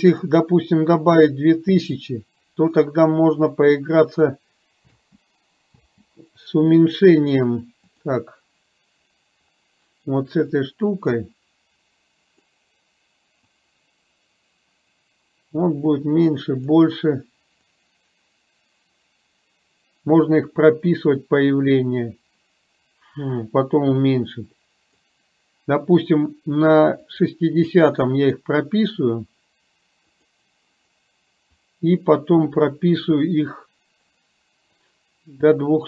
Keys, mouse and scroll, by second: 4.9 space, 5.9 space, 10.5-12.5 drag, 13.5-16.8 drag, 17.7-25.0 drag, 27.2 click, 30.2 click, 31.8-35.8 drag.